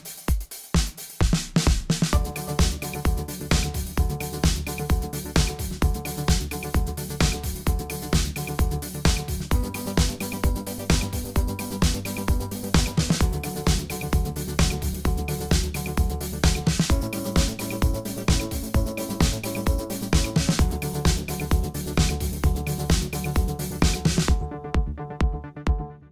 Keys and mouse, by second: 1.8-3.6 drag, 2.6 w, 3.6 w, 5.2 click, 5.5 g, 10.8 a, 10.9 a, 11.6 b, 12.4 w, 13.2 ctrl+z, 14.1 a, 14.6 b, 15.2 w, 16.9 click, 18.1 w, 19.2 middle click, 19.5 click, 20.1 w, 22.5 w, 23.2 w, 25.3 b.